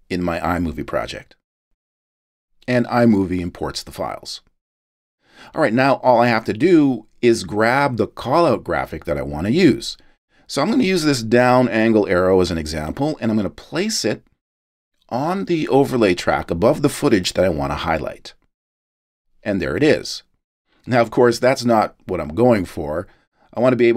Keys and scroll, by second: 20.4 space.